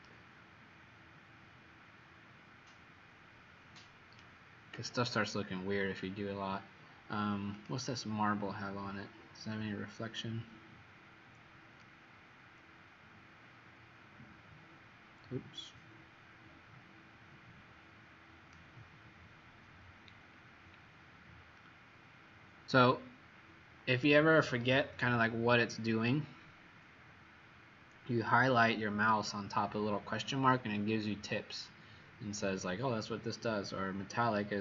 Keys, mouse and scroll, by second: 7.6 click, 20.3-20.9 scroll down 1.